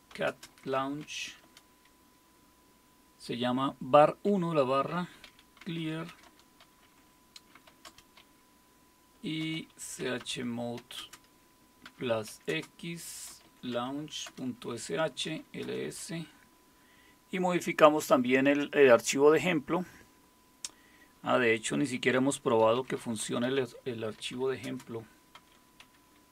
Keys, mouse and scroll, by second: 0.0-1.5 typing, 5.0-8.0 typing, 9.2-15.9 typing, 22.5-26.3 typing.